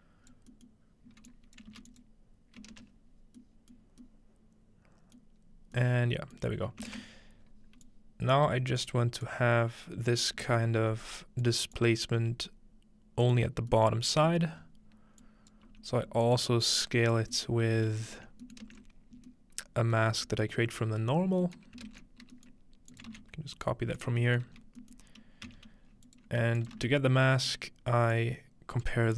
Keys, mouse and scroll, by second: 1.7 shift+d, 2.7 ctrl+space, 3.4-5.8 middle drag, 5.4-7.2 scroll up 1, 6.6-7.4 ctrl+middle drag, 7.2-8.3 scroll down 2, 7.9-10.9 drag, 8.5 g, 10.6 middle click, 10.8 g, 11.5 click, 11.8 click, 12.2 g, 13.3 click, 13.5-14.0 scroll down 1, 14.0 scroll up 2, 14.6 scroll up 2, 15.2 click, 15.7 g, 16.3 ctrl+click, 16.4 scroll up 1, 17.3 click, 17.5-18.7 middle drag, 17.7-19.2 typing, 18.1-19.3 ctrl+drag, 18.3-19.3 scroll down 1, 21.9 ctrl+space, 22.9 shift+click, 23.1 shift+d, 24.6-25.7 scroll up 2, 25.5 g, 25.7 click, 26.2 click, 26.7 shift+click, 26.8 typing, 27.6-28.2 drag, 28.3-28.9 drag.